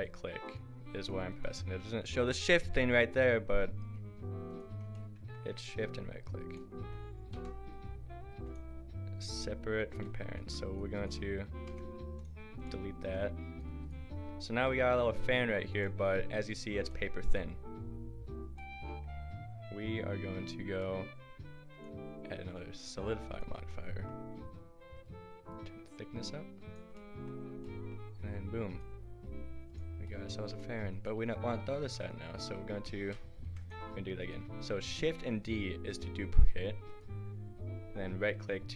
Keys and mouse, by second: 7.3 p, 9.9 Tab, 11.7 Delete, 13.3 click, 14.8 g, 26.9-28.7 middle drag, 28.7-30.1 drag, 31.8 shift+d, 33.5 Delete, 34.2-35.0 drag, 35.0 shift+d.